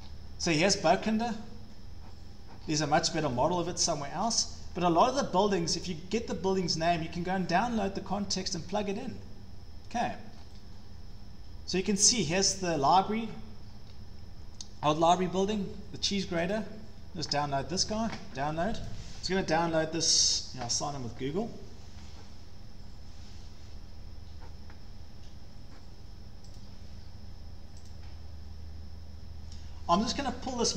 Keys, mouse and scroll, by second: 0.0-1.0 scroll, 2.6 scroll, 4.2 scroll, 5.5 scroll, 6.6 scroll, 8.6 scroll, 10.3 scroll, 10.7 scroll down 8, 13.6-14.2 scroll, 15.0 scroll, 16.5 click, 18.9 click, 20.3 click, 24.4-25.3 drag, 26.6-27.7 drag.